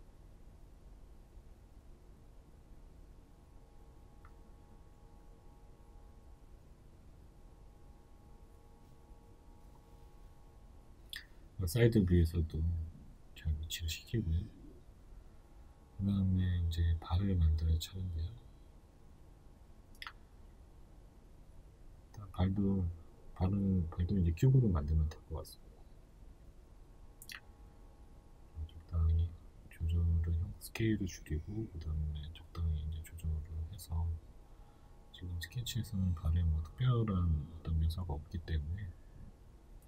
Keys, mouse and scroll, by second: 3.1 scroll, 9.5 g, 16.3-16.7 scroll, 18.3-26.6 middle drag, 18.3-19.7 scroll, 20.0 scroll, 27.7-30.4 middle drag, 27.7 s, 30.4 click, 30.7 s, 36.9 click, 38.6-39.8 middle drag.